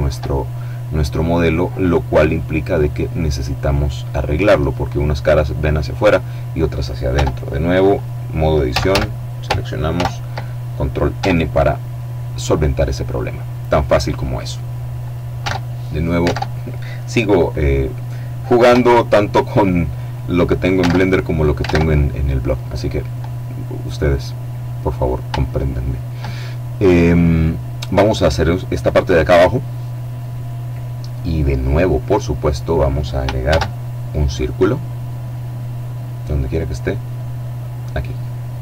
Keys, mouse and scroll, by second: 6.2 Tab, 7.8 a, 9.1 ctrl+n, 10.3 Tab, 11.1 middle click, 11.7-12.3 scroll down 1, 12.3 middle click, 13.5-13.8 scroll down 2, 13.8 click, 14.5 alt+Tab, 15.3 alt+Tab, 17.8 KP_7, 20.0 alt+Tab, 20.9 alt+Tab, 23.1-23.7 scroll up 2, 24.6-25.8 shift+drag, 30.5-32.4 middle drag, 32.6 shift+a, 36.9 click, 38.3-38.6 drag.